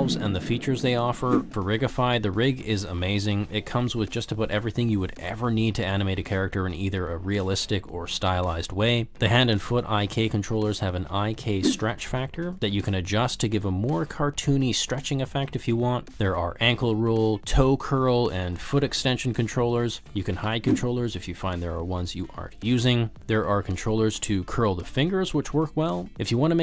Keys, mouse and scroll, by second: 0.7 click, 1.3 g, 2.5 click, 3.1 ctrl+z, 4.0 click, 4.6 r, 5.1 z, 5.3 click, 5.8 ctrl+z, 6.0 drag, 6.4 r, 7.1 r, 7.7 z, 8.2 ctrl+z, 10.4 click, 11.7 g, 14.3 click, 14.7 g, 16.2 click, 16.5 alt+z, 16.8 g, 17.6 r, 18.7 ctrl+z, 18.8 r, 21.5 click, 21.9 drag, 22.1 drag, 22.2 click, 22.4 drag, 22.5 click, 22.8 click, 23.4 drag, 23.7 middle drag, 24.3 s, 24.8 s, 25.6 shift+g, 25.7 shift+click, 25.9 shift+click, 26.1 middle click, 26.3 r.